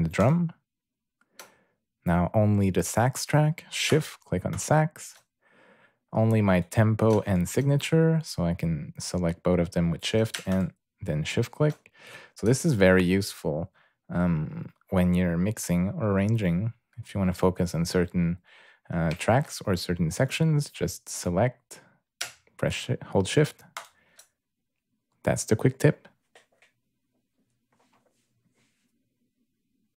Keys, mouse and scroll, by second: 0.2 shift+click, 4.5 shift+click, 7.3 shift+click, 10.5 shift+click, 23.8 shift+click.